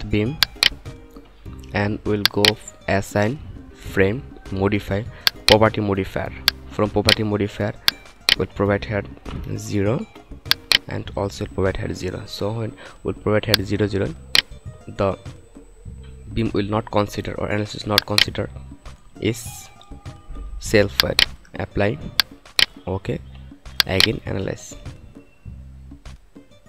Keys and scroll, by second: 9.3 0, 11.5 0.